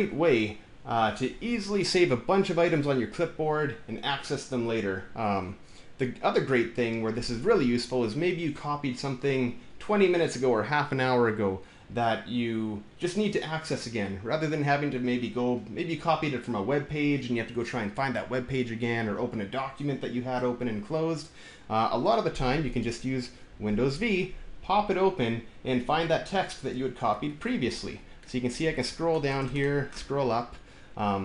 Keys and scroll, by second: 23.5 super+v.